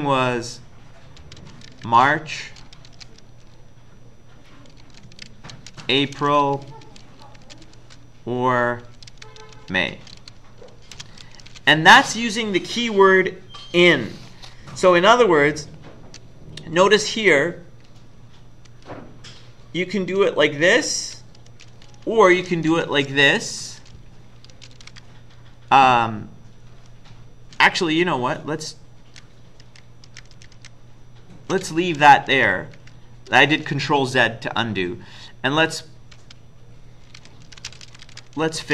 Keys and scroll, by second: 1.0-3.0 typing, 4.6-7.7 typing, 8.9-12.0 typing, 14.9 Left, 15.4-17.0 Left, 17.0 Up, 18.7 Up, 20.2 Left, 20.8 Left, 21.5 Down, 21.8 Down, 22.0 Down, 22.4 Right, 22.7 Down, 24.3-25.3 typing, 29.1 ctrl+z, 29.6 ctrl+z, 30.1 ctrl+z, 30.3 ctrl+z, 32.4 Down, 32.8 Down, 36.2-38.7 typing.